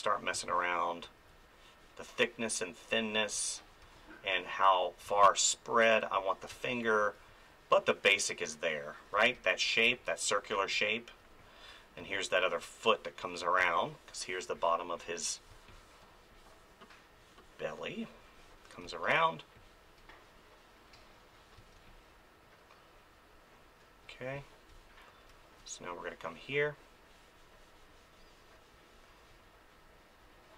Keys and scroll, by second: 3.8 space, 9.1 space, 12.0 space, 13.6 space, 15.5 space, 18.8 space, 21.6 space.